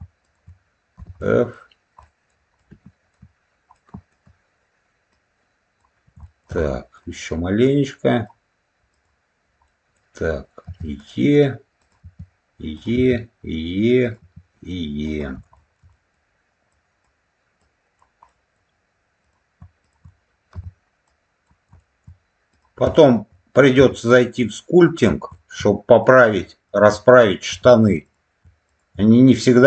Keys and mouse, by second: 0.1 shift+click, 1.1 middle click, 2.0 middle click, 2.5 alt+middle click, 3.6 alt+middle click, 5.0 click, 6.1 shift+middle click, 6.5 middle click, 7.5 click, 8.8 click, 9.6 middle click, 10.6 e, 11.7 click, 11.9 e, 12.6 click, 12.8 e, 13.9 click, 14.1 e, 14.9 click, 15.4 shift+middle click, 15.8 middle click, 16.6 click, 17.5 click, 18.2 middle click, 19.1 click, 19.7 shift+click, 20.4 f, 21.0 click, 21.7 shift+middle click, 22.4 click, 22.9 shift+click, 23.7 f, 24.3 click, 25.2 shift+middle click, 25.9 click, 26.6 shift+click, 27.4 f, 27.9 click, 28.6 shift+click.